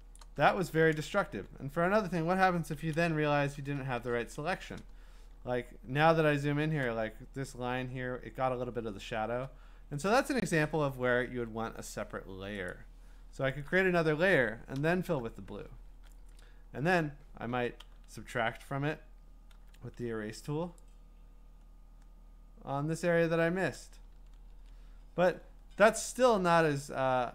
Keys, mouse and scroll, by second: 0.0-0.7 scroll, 0.2 click, 1.3 b, 2.8-4.0 typing, 5.4-6.6 scroll, 12.8 click, 14.7 alt+BackSpace, 17.5 ctrl+d, 19.5 e, 23.8 click, 24.5 ctrl+z, 25.9 ctrl+z, 26.7 ctrl+alt+z.